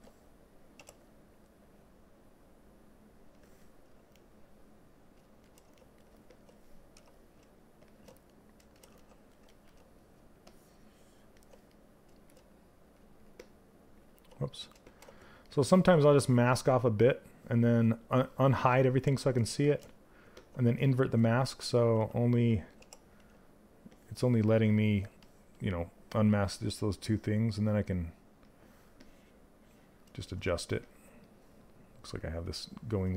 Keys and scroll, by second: 6.5 q, 13.6 ctrl+z, 22.3 w.